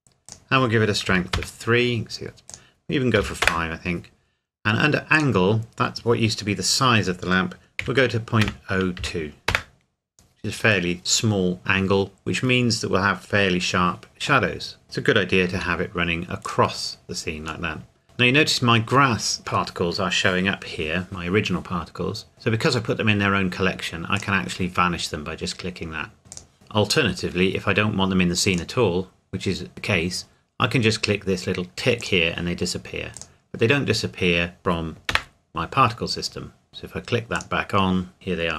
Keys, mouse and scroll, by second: 1.1 KP_3, 1.3 KP_Enter, 2.5 click, 3.2 KP_5, 3.4 KP_Enter, 4.5 KP_Enter, 5.1 click, 7.8 KP_Decimal, 8.4 KP_0, 8.9 KP_2, 9.5 KP_Enter, 14.5 middle click, 14.8-15.3 scroll down 1, 15.5 g, 16.5 click, 17.7 middle click, 24.1 click, 26.3 click, 28.5 click, 32.0 click, 35.1 KP_0, 36.7 click.